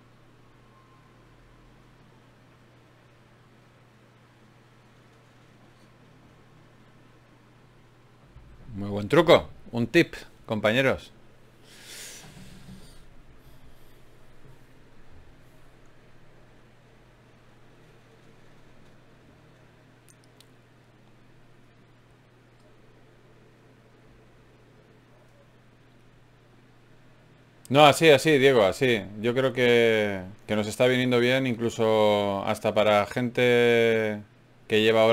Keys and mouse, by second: 4.2 Tab, 5.3-11.2 drag, 11.2 KP_Divide, 12.1 Tab, 17.0 ctrl+Tab, 20.7 e, 22.7 g, 27.6-30.4 middle drag, 30.8-33.2 middle drag, 34.4 s.